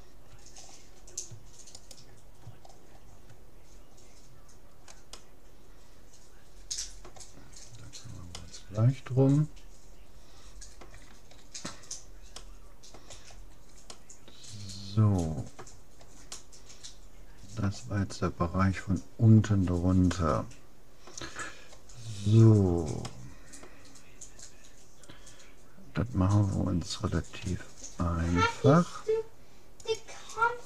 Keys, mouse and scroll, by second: 0.7 middle click, 1.9-3.3 right drag, 4.3-5.1 scroll up 1, 5.1-6.9 middle drag, 7.5-10.3 middle drag, 10.5-15.7 middle drag, 16.3-17.9 middle drag, 19.5-20.1 scroll up 1, 20.1 middle click, 21.9-22.5 scroll up 1, 22.5-23.1 scroll down 1, 23.5-24.7 middle drag, 27.4 s, 30.5-30.6 scroll up 1.